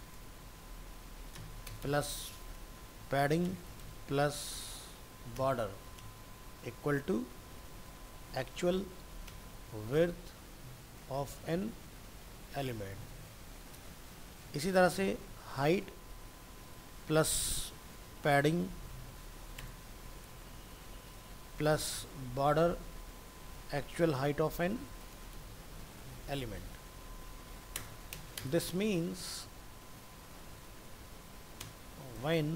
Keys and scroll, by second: 13.3 ctrl+c, 14.0 ctrl+v, 15.4 ctrl+shift+Right, 24.7 shift+Right.